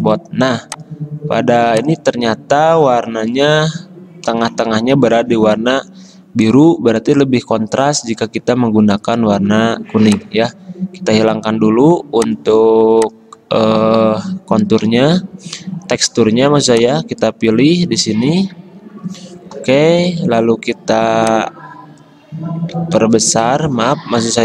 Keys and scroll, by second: 14.9 i, 20.1 a, 22.9 ctrl+z, 24.3 v.